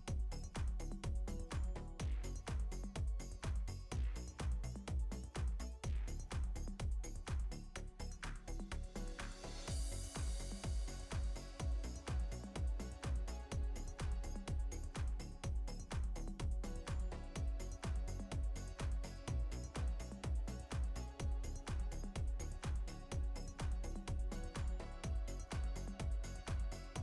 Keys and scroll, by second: 2.6 ctrl+t, 8.2 ctrl+0, 9.3 ctrl+t.